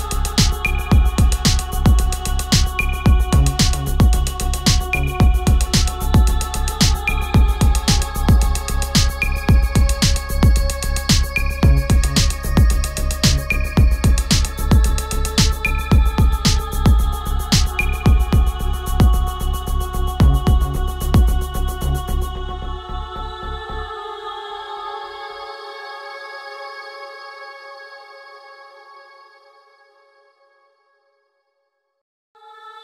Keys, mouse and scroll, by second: 12.6 click, 13.1-17.6 ctrl+drag, 17.7-22.9 drag, 27.2-31.4 drag, 32.5-32.8 typing.